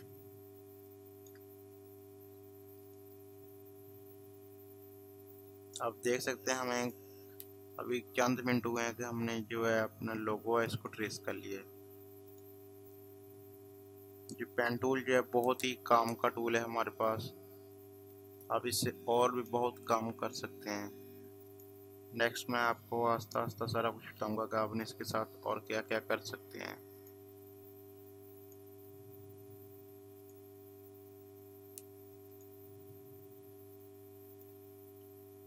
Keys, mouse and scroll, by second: 0.9 click, 1.2 space, 2.8 click, 6.7 click, 14.5 click, 18.3 click, 19.0 space, 19.0 click, 19.3 space, 21.5 click, 24.2 space, 24.4 click, 24.7 space, 27.0 click.